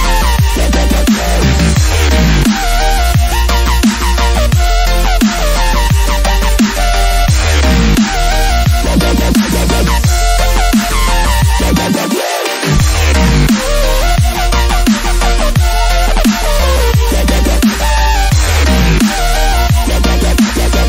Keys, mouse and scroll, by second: 2.2 right click, 2.9-7.3 drag, 7.3-14.5 drag, 14.7-17.5 drag, 17.5-18.1 scroll down 1, 18.2 ctrl+-, 19.2 ctrl+t, 19.9-20.8 drag.